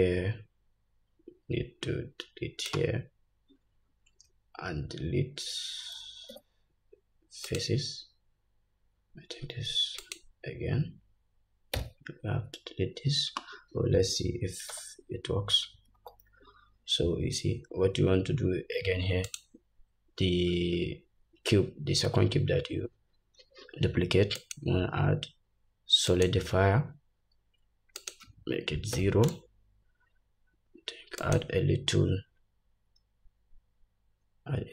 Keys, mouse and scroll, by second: 11.8 x, 14.8 Tab, 16.0 /, 17.3-18.5 scroll up 1, 18.5 scroll up 1, 19.3 click, 24.4-34.7 drag.